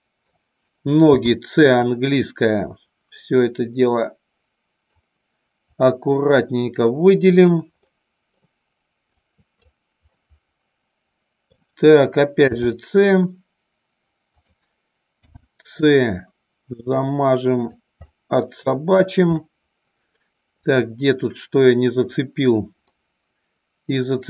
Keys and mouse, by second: 1.0 c, 5.8 click, 7.8 middle click, 9.0 right click, 10.0-11.4 middle drag, 12.4 g, 14.3 click, 15.2 c, 18.0 middle click, 18.9 right click, 19.3-20.5 middle drag, 22.8-23.8 middle drag.